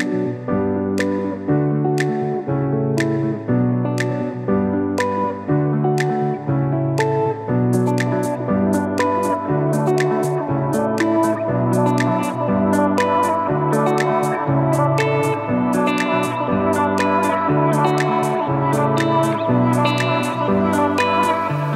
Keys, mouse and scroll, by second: 0.0-3.3 typing, 6.1-9.0 typing, 19.1 i, 19.3 click.